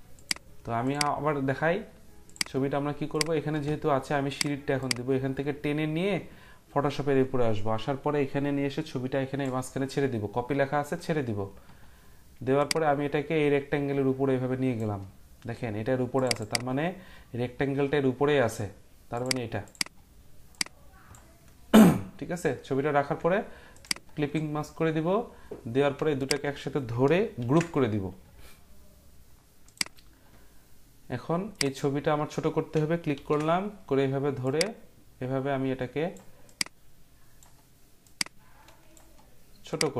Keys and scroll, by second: 27.4 ctrl+g, 33.1 ctrl+t.